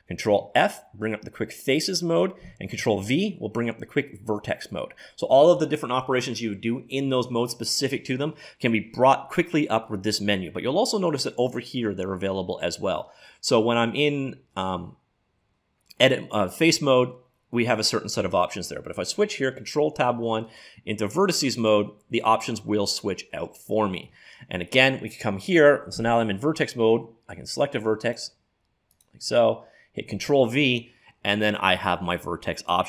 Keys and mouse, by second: 0.3 ctrl+f, 13.3 middle click, 16.0-18.3 drag, 16.6-17.9 right drag, 19.0 ctrl+Tab, 20.5-23.5 drag, 23.5-26.0 middle drag, 28.0 click, 28.9 right click, 29.9 click, 30.1 ctrl+v.